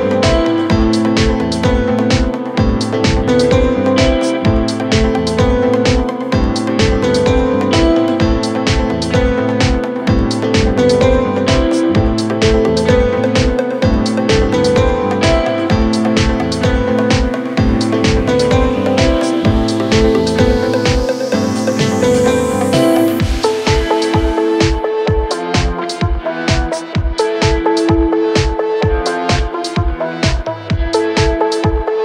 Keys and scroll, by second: 15.6 shift+Page_Down, 16.1 w, 19.6 F3, 20.5 Escape, 21.6 shift+F2, 22.0 Escape, 25.7 d, 30.9 f.